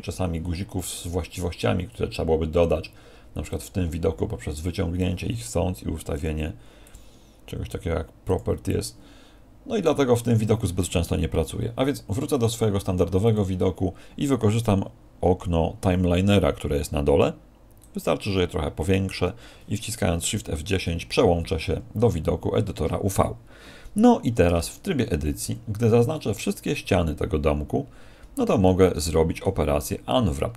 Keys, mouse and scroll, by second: 13.3 click, 20.4 shift+F10, 21.9-22.3 scroll up 2, 24.4 Tab, 25.1 a, 26.1 middle click, 29.1 shift+middle click, 29.5-30.3 scroll up 1, 30.3 middle click, 30.3 scroll up 2.